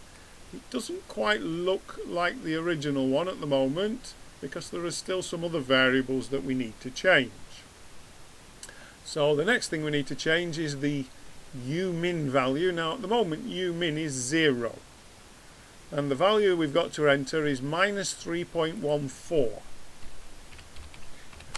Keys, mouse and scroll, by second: 9.2 scroll down 1.